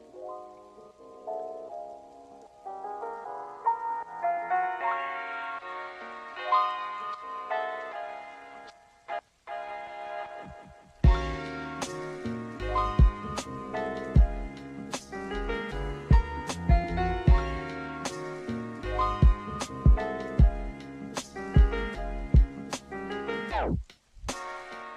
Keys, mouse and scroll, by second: 0.0-3.4 drag, 5.8 Tab, 7.0 right click, 9.0 click, 10.0-12.1 drag, 12.8 click, 14.5 Tab, 16.4 click, 18.2-21.0 drag, 19.8 KP_0, 21.5-22.4 drag, 22.7-23.7 drag, 24.3 click.